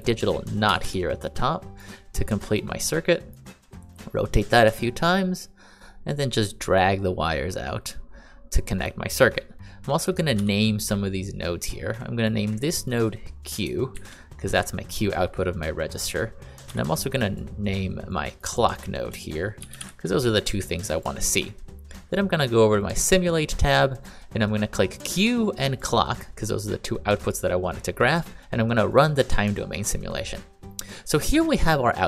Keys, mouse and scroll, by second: 0.6 r, 0.8 r, 9.9 click, 10.3 n, 12.1 click, 13.9 shift+q, 14.4 click, 17.2 click, 17.2 n, 19.3-20.2 typing, 20.9 click, 24.9 click, 25.7 click.